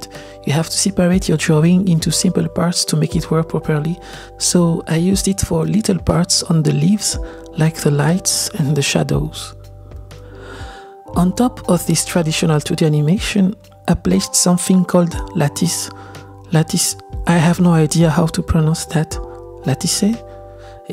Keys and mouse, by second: 1.8 click, 3.8 click, 5.2 drag, 6.4-7.4 drag, 7.7 click, 9.2-9.8 drag, 10.6 click, 10.8-11.8 drag, 13.0 click, 14.0-17.2 drag, 19.3-20.9 drag.